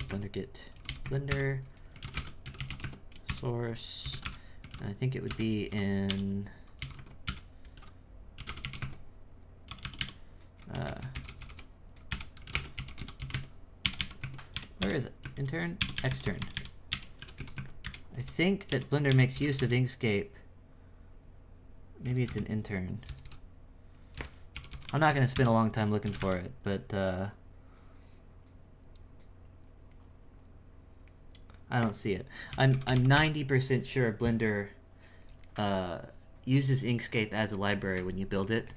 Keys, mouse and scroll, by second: 38.5-38.7 shift+middle drag.